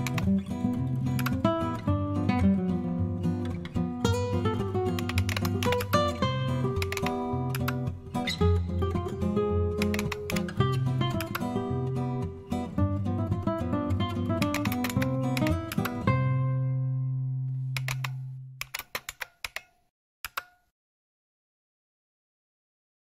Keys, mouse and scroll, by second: 0.0 typing, 1.1 Return, 4.7-7.3 typing, 7.5 Return, 9.5-10.7 typing, 11.1 Return, 14.1-20.9 typing.